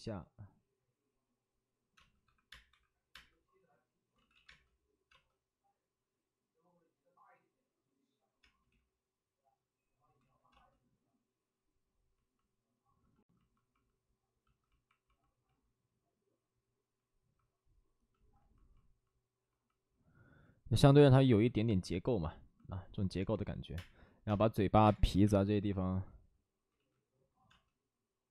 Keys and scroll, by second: 1.9-3.0 typing, 4.1 ctrl+z, 4.4 ctrl+z, 4.4 space, 8.6 ctrl+z, 8.6 space, 10.1 ctrl+z, 10.4 space, 23.7-25.2 typing, 26.7 ctrl+z, 27.4 space.